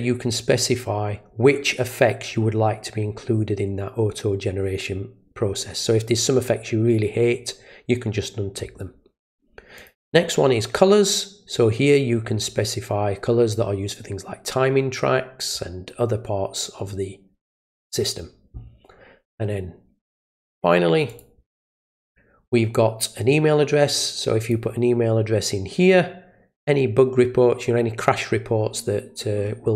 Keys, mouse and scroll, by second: 9.8 click, 21.1 click, 24.0 click.